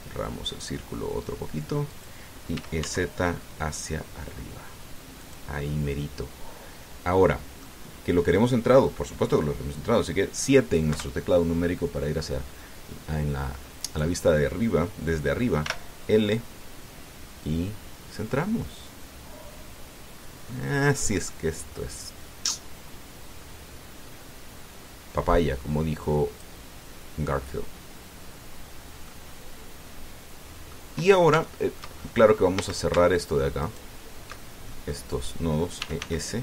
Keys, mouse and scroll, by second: 2.7 click, 3.3 e, 3.6 z, 6.0 click, 11.7 KP_7, 14.6 right click, 16.4 l, 18.2-27.4 drag, 29.2-29.6 scroll down 1, 29.8-31.7 drag, 32.2 shift+middle click, 32.7-33.1 shift+scroll up 2, 33.4 a, 34.4 alt+shift+right click, 35.5 alt+shift+middle click, 35.6 click.